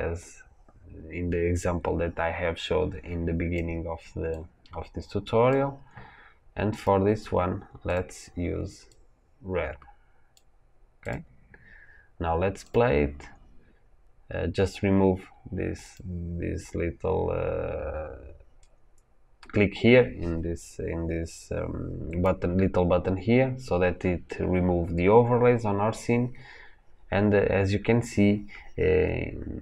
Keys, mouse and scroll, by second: 6.7 click, 12.6 click, 15.7 click.